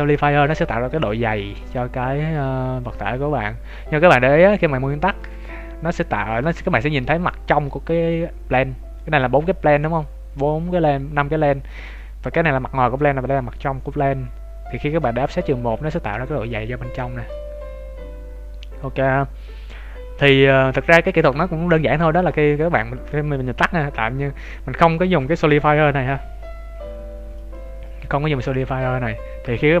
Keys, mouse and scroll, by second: 3.9-5.2 scroll up 3, 5.2 click, 5.8 scroll down 3, 6.4 shift+middle click, 6.8 middle click, 7.6 middle click, 7.8 shift+middle click, 11.9 middle click, 13.0 middle click, 15.3 click, 16.1 middle click, 20.7 click, 27.3 click, 28.7 scroll up 2, 29.3 Tab, 29.3-29.8 scroll up 2.